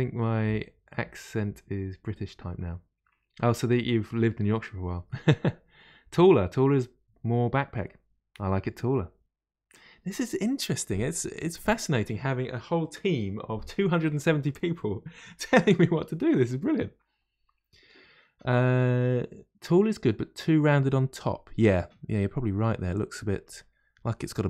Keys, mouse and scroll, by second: 11.0-14.1 middle drag, 20.6-23.6 middle drag, 24.1-24.4 scroll up 2.